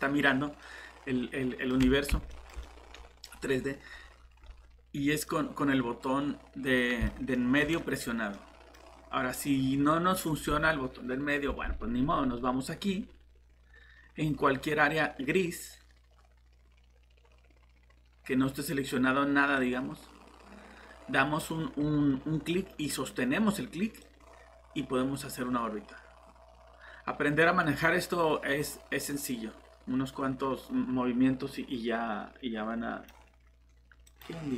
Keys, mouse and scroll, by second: 3.9 scroll up 1, 4.4 scroll down 1, 5.3 middle click, 7.5 typing, 7.7 scroll up 1, 8.3 middle click, 8.8 scroll down 1, 9.3 middle click, 19.5 click.